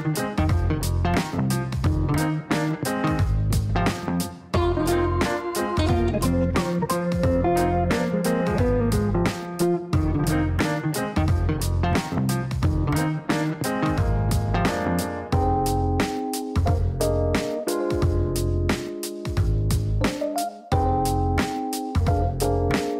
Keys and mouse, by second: 0.0 click, 2.2 click, 6.4 click, 8.1-9.5 typing, 10.3 click, 11.0 click, 13.0-14.6 typing, 16.4 click, 17.9 click, 19.2 click, 22.6 click.